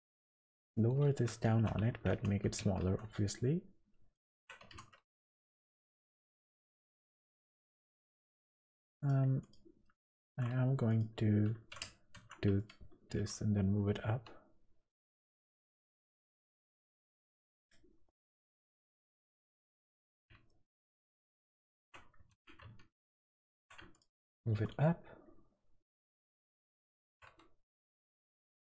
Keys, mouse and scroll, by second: 0.1-0.8 scroll down 3, 0.6 scroll up 1, 1.3 scroll up 2, 1.4 shift+middle click, 2.1 Tab, 2.6 a, 2.8 s, 4.4 Tab, 4.6 g, 7.8 Tab, 8.3 Tab, 8.9 click, 9.4 click, 10.2 shift+s, 10.9 click, 12.1 shift+s, 13.1 g, 15.9 click, 16.8 shift+middle click, 17.6 click, 18.0 middle click, 19.0 scroll up 2, 19.3 click, 20.5 shift+middle click, 21.5 scroll up 2, 21.7 Tab, 22.3 alt+a, 23.0 alt+shift+click, 23.5 2, 23.9 alt+shift+click, 24.5 g, 27.1 Tab, 27.3-27.7 scroll down 4, 27.7 click, 28.1 click, 28.7 shift+click.